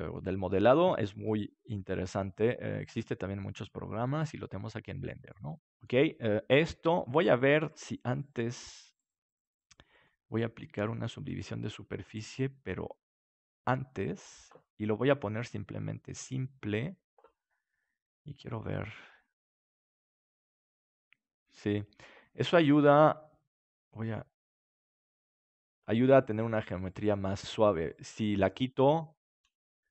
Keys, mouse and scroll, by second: 8.9-10.8 right drag, 9.9-11.9 drag, 13.5-17.7 drag, 18.6-21.0 drag, 20.5-23.9 middle drag, 23.9-26.9 drag, 26.0-28.9 middle drag, 28.9-29.9 drag.